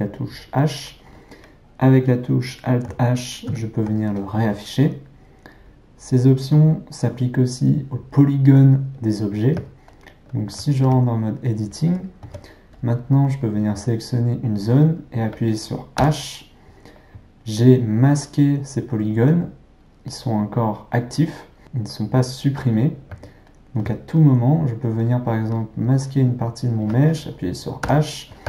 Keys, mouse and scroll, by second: 3.5 alt+h, 9.9-10.9 ctrl+middle drag, 10.9 Tab, 12.8 click, 14.1 click, 16.0 h, 23.5-26.3 ctrl+middle drag, 26.3 click, 27.8 h.